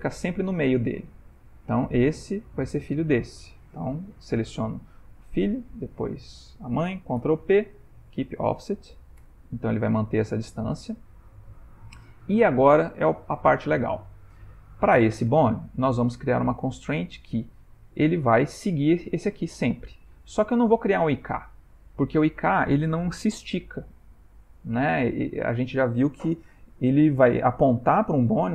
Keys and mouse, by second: 1.2 click, 2.8 shift+click, 5.3 click, 6.0 shift+click, 7.2 ctrl+p, 11.2 ctrl+middle click, 12.0 shift+middle click, 12.5 ctrl+middle click, 13.8 middle click, 14.7 click, 15.4 Tab, 18.5 click, 18.9 g.